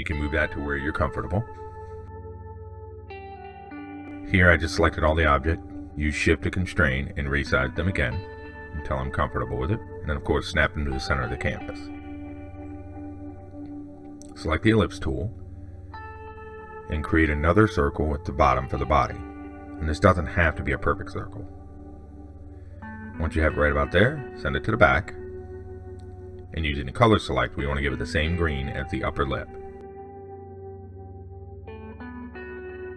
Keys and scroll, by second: 26.7 ctrl+shift+Down.